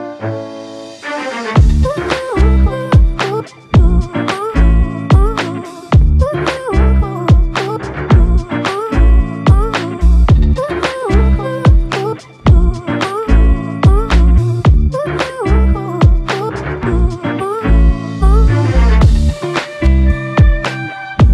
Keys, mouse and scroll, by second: 0.7 ctrl+click, 1.9 ctrl+click, 2.8 ctrl+click, 7.3 ctrl+click, 12.1 ctrl+alt+click, 13.1 alt+click, 15.5 alt+shift+click, 16.8 ctrl+click, 20.8 ctrl+click.